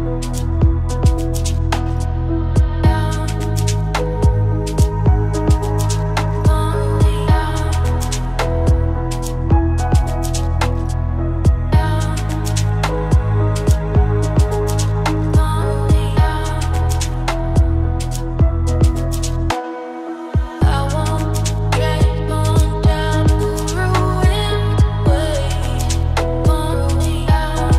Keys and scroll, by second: 8.3 ctrl+z, 15.0 ctrl+space, 20.9 ctrl+shift+i.